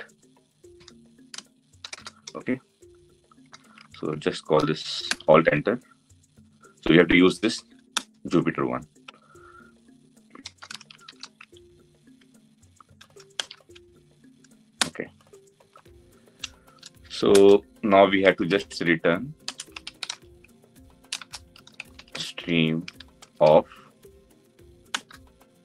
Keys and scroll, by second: 4.9 alt+Return, 13.2 alt+Return, 24.6 Return.